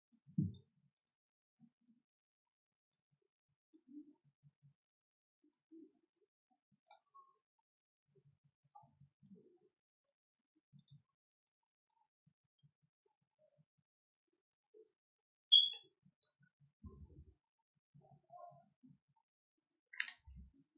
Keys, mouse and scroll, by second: 0.1 click, 0.9 click, 1.8-2.8 drag, 3.7-5.4 drag, 6.0 click, 7.0-8.6 drag, 9.1 click, 10.7 click, 11.4 click, 12.5-16.2 drag, 20.2 ctrl+z.